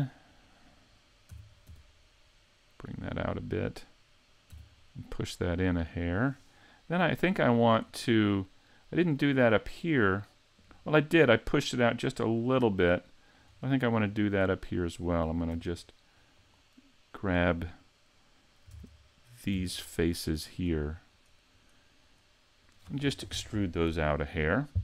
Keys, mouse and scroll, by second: 0.4 click, 1.3 s, 3.2 click, 4.5 e, 6.1 click, 6.6 middle click, 7.9 scroll down 2, 9.4 middle click, 13.6 middle click, 13.6-14.1 scroll up 2, 14.1-14.5 scroll up 1, 14.5 middle click, 15.5 ctrl+r, 17.3 click, 18.7 ctrl+Tab, 20.5 right click, 21.1 shift+right click, 21.5 shift+right click, 22.1 right click, 22.6 right click.